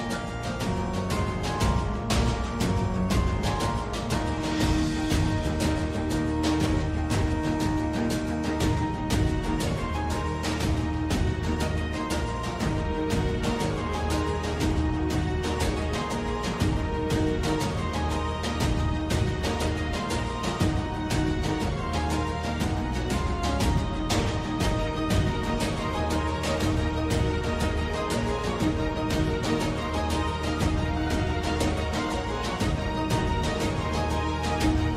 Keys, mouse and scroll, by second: 1.4 ctrl+z, 2.3 alt+click, 2.6 1, 2.9 alt+click, 3.7 click, 4.4-6.3 alt+drag, 7.4 shift+click, 7.8 alt+click, 8.8 alt+f, 11.3 ctrl+z, 11.7 alt+click, 12.9 alt+d, 13.0 alt+d, 16.6 alt+d, 17.1-18.5 alt+drag, 18.7 2, 19.0 click, 19.2 click, 20.2 alt+f, 21.2 ctrl+z, 22.2 alt+d, 23.8 click, 25.9 h, 27.8 alt+h, 30.2 ctrl+h, 32.4 alt+h.